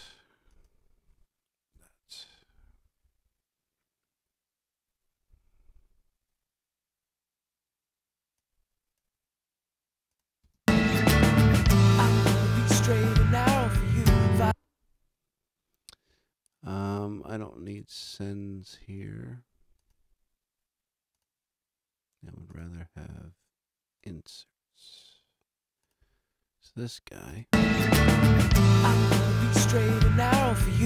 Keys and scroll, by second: 1.7 a, 10.4 space, 27.3 space.